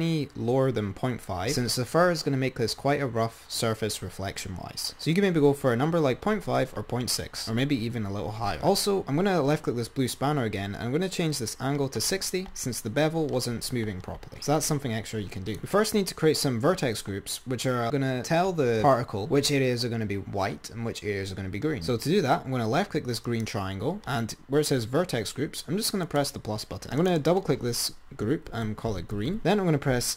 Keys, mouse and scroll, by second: 15.7 click, 23.5 click, 26.3 click, 26.8-29.4 drag, 29.4 e.